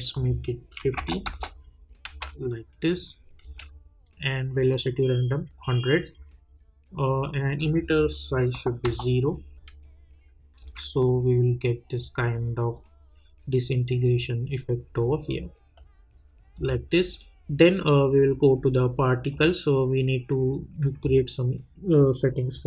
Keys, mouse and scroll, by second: 0.1 click, 1.2 Return, 2.1 space, 4.7-7.8 drag, 7.9 click, 8.8 Return, 10.6 space, 16.5 space, 17.6 scroll down 1, 19.3 click, 19.7-22.6 scroll down 1.